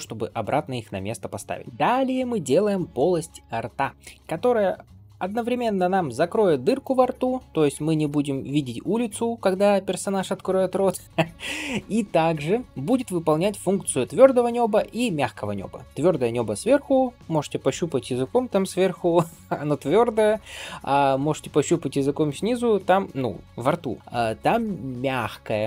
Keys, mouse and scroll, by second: 0.4 scroll down 1, 0.8-1.6 scroll up 1.